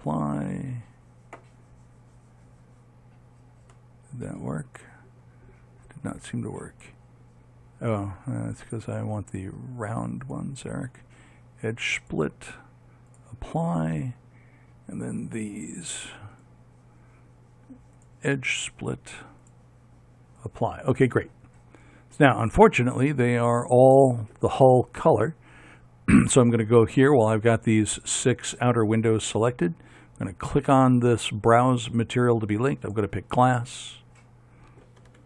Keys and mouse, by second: 0.7-1.9 drag, 4.4 middle click, 6.3-9.0 drag, 9.0-10.4 right drag, 10.4-12.3 middle drag, 13.3-16.6 drag, 16.6-18.1 right drag, 20.5-28.8 drag, 31.9-34.2 drag.